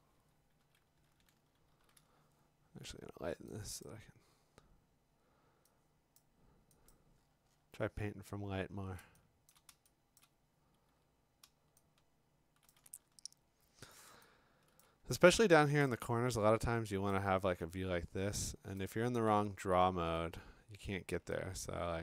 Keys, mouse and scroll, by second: 1.7 ctrl+u, 3.9 click, 6.2 click, 6.9 click, 7.2-8.0 scroll, 8.5 scroll, 9.5 click, 9.7 click, 10.2 click, 11.7-12.6 f, 12.7 click, 12.9-13.9 scroll, 14.1 middle click, 14.8 click, 15.3 middle click, 15.5 middle click, 17.1 click, 17.9-18.8 scroll, 18.8-19.4 click, 19.3-20.2 typing, 21.7-22.0 f.